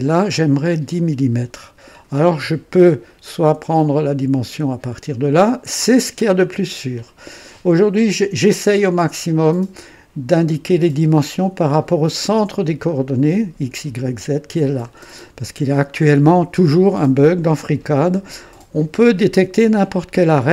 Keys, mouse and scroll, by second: 3.0 right click.